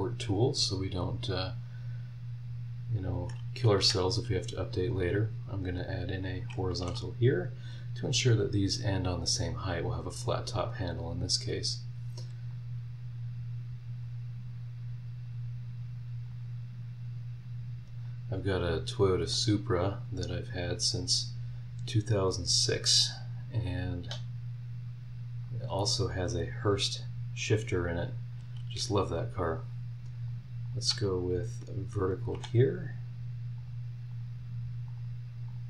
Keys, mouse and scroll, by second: 1.3 click, 3.2 click, 3.8 Escape, 4.9 click, 6.2 click, 6.8 h, 10.2 scroll down 2, 10.6-11.2 scroll up 4, 12.5-14.2 drag, 15.2-16.4 drag, 16.5 scroll down 2, 17.0 scroll up 2, 18.0-19.4 drag, 19.6 scroll down 1, 19.9-20.5 scroll up 3, 21.5-23.1 drag, 23.1 scroll down 1, 23.6 scroll up 1, 24.6-25.6 drag, 25.6 middle click, 25.8 scroll down 1, 26.2 scroll up 1, 26.8 scroll up 1, 28.1 click, 29.6 click, 30.3 click, 30.6 click, 32.1 click, 32.3 v, 33.6 click, 34.1 click, 34.9 click, 35.5 click.